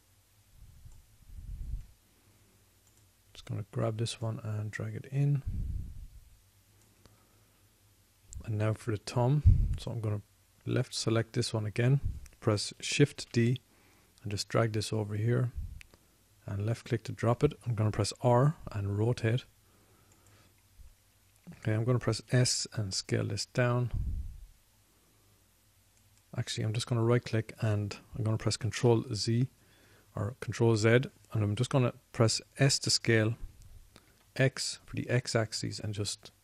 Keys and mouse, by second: 3.2 middle click, 14.6 shift+d, 18.3-19.9 drag, 19.4 r, 21.7 click, 23.7 s, 27.6-28.6 middle drag, 30.2 ctrl+z, 34.1 s.